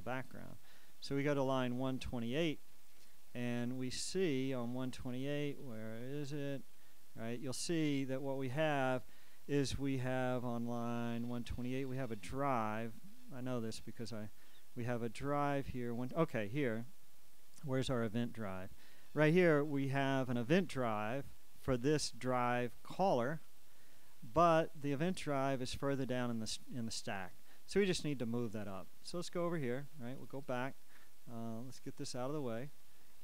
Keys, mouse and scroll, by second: 0.1-0.9 scroll down 4, 1.3-2.1 scroll down 2, 2.3 click, 3.1 click, 3.6-4.2 scroll up 2, 5.2 click, 6.1-7.1 scroll up 2, 7.4 middle click, 8.5 click, 10.4-10.9 scroll up 1, 11.0 click, 12.3 click, 19.8-26.9 drag, 30.2 click, 32.2-33.2 drag.